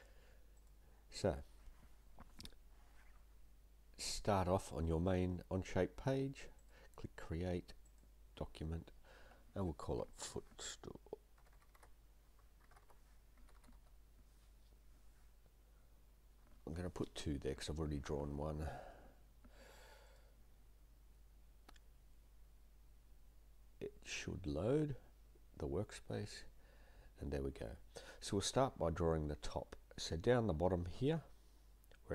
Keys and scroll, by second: 10.1 typing, 11.2-14.2 typing, 16.5 space, 16.7 2.